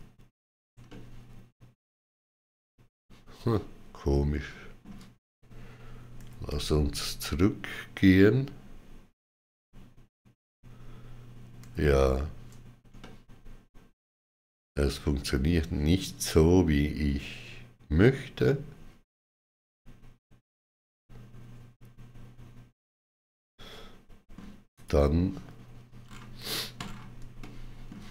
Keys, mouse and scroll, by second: 0.7 shift+middle click, 6.0 ctrl+z, 10.2 ctrl+z, 12.8 middle click, 24.5 click, 25.8-26.2 scroll down 3, 26.6-27.0 scroll down 6, 27.2 shift+middle click.